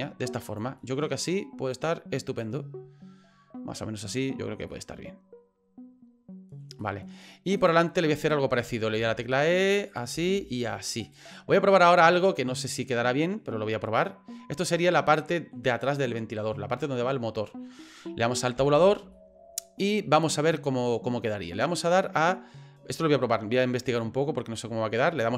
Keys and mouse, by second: 0.9 middle click, 1.7 click, 4.8-6.6 middle drag, 6.9 middle click, 7.6 right click, 8.0 middle click, 9.0 e, 10.1 s, 11.4 middle click, 11.9 right click, 12.1-15.5 middle drag, 18.6 Tab, 19.3-21.1 middle drag.